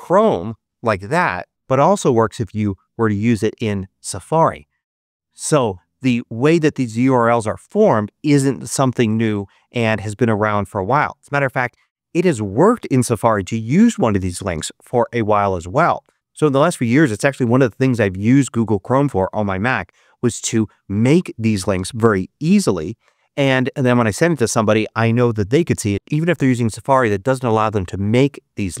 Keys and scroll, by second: 1.5 super+v, 2.5 Return.